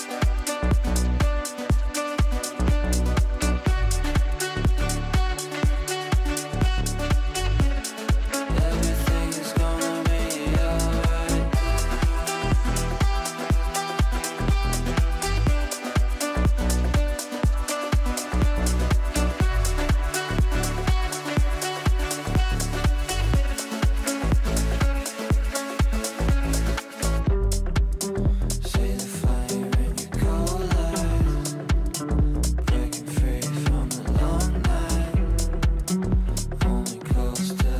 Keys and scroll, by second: 1.6 t, 3.7 Down, 13.7 c.